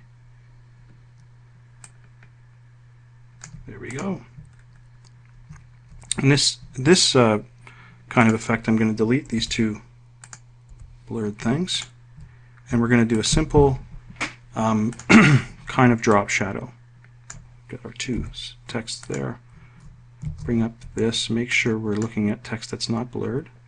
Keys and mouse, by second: 8.4 click, 9.6 Delete, 10.4 click, 10.9 Delete, 12.0 click, 13.4 click, 15.2 click, 16.3-17.7 ctrl+drag, 18.4 Delete, 19.2 click, 20.4 ctrl+shift+f, 21.7 click.